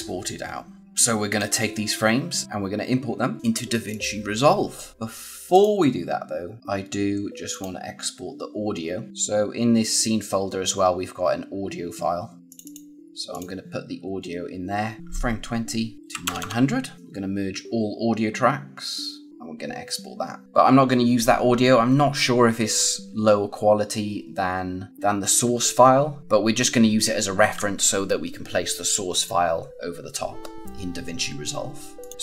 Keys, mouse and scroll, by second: 1.2 click, 3.8 click, 5.4 click, 7.5 click, 12.4 click, 15.9 click, 19.3 click, 32.1 click.